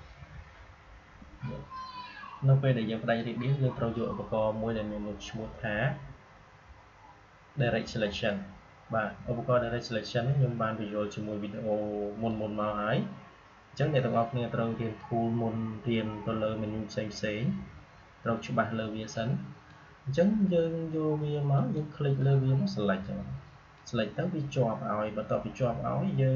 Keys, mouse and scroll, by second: 8.0 click, 12.2-26.3 drag.